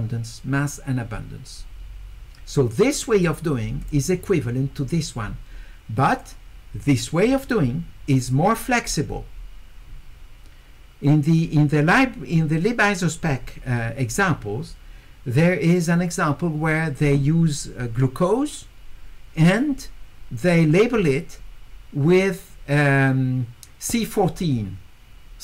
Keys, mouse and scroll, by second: 3.0 click, 3.8 click, 6.1 click, 8.8 middle click, 8.8-9.4 scroll up 2.